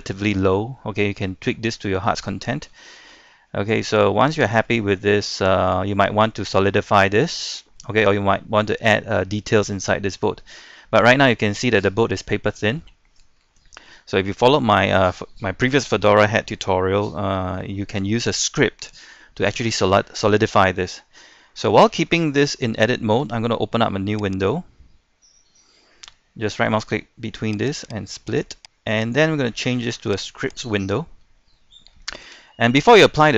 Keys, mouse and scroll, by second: 0.6 shift+middle click, 1.2-1.5 scroll down 1, 1.5 middle click, 2.4-2.7 scroll up 1, 2.7 middle click, 3.5 shift+middle click, 3.9-4.6 scroll up 2, 5.2 middle click, 5.9-6.2 scroll down 1, 6.2 shift+middle click, 7.4 shift+middle click, 9.7 middle click, 10.4 scroll up 1, 10.6 shift+middle click, 12.4 shift+middle click, 13.5 shift+middle click, 14.1 scroll down 1, 14.3-15.7 middle drag, 16.3-21.6 shift+middle drag, 21.6-21.9 scroll up 1, 21.9 middle click, 22.9 shift+middle click, 24.4 right click, 27.7 click, 31.2-32.4 scroll down 1, 32.5 shift+middle click, 33.2-33.3 scroll up 1.